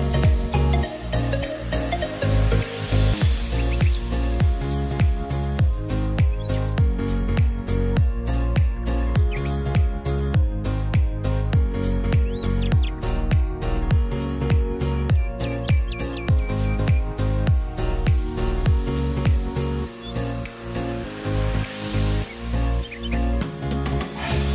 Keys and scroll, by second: 9.2 alt+g, 9.8-11.5 typing.